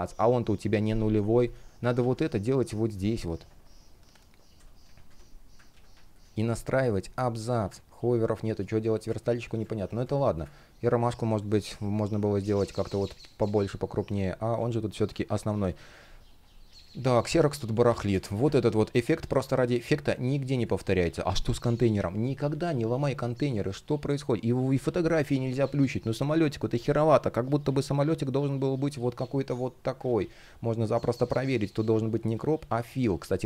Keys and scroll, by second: 1.6 super+x, 4.2 BackSpace, 5.3 super+v, 6.3 alt+space, 7.3 super+z, 7.8 space, 8.6 space, 9.6 space, 11.0 space, 14.1 super+z, 14.7 space, 17.3 space, 18.9 shift+Return, 20.3 space, 29.6 super+z.